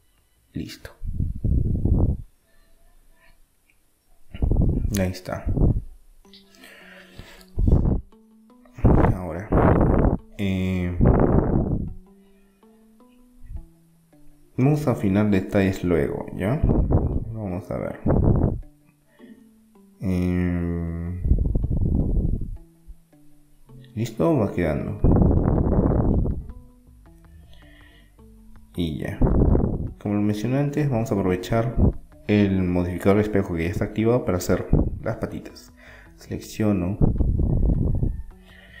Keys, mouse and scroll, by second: 0.7 middle click, 3.0 middle click, 5.4 middle click, 7.4 a, 10.0 middle click, 13.3-16.7 middle drag, 14.1 Tab, 21.0-23.0 middle drag, 24.6-26.3 middle drag, 26.3-27.4 right drag, 26.8 Tab, 27.4 click, 27.7-29.4 middle drag, 29.0-31.0 drag, 30.9 middle click, 33.1 middle click, 33.1-35.0 drag, 35.0-38.8 right drag.